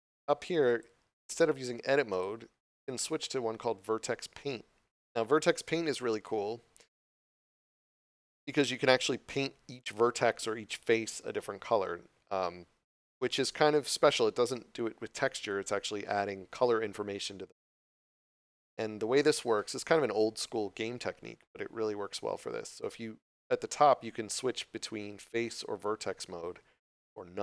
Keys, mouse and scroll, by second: 0.7 click, 6.1 click.